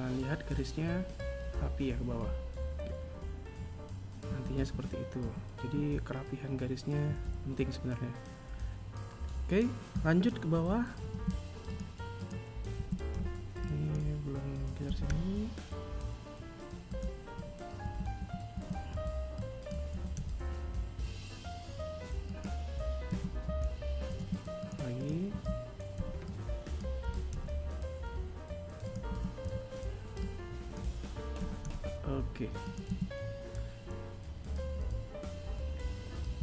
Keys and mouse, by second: 4.2 a, 4.6 a, 11.0 r, 17.7 a, 18.1 a, 18.4 a, 18.8 b, 23.0 a, 23.9 r, 29.0 a, 29.3 b, 32.7 a, 36.2 z.